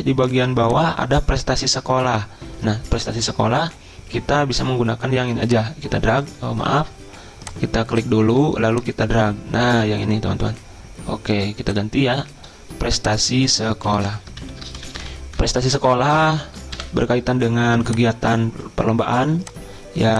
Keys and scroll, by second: 6.8 ctrl+z, 13.9 Delete, 14.4 ctrl+Down, 14.8 ctrl+shift+Right, 14.9 ctrl+shift+Right, 15.1 ctrl+shift+Right, 15.4 ctrl+shift+Right, 16.8 Delete.